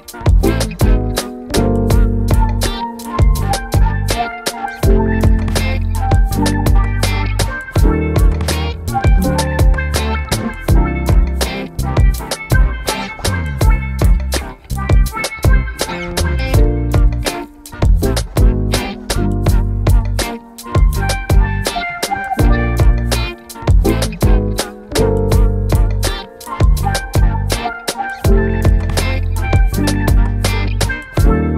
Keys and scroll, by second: 4.6 BackSpace, 5.7-6.7 typing, 8.0 Return, 16.3 w, 24.2 Escape.